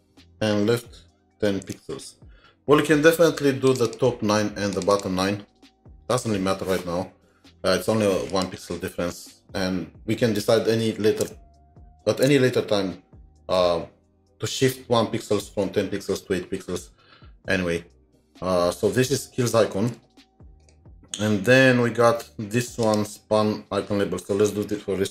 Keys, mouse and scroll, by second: 3.9 typing, 4.0 double click, 4.9 double click, 10.9 double click, 11.3 typing, 13.0-13.8 typing, 19.5 Left, 19.8 ctrl+s.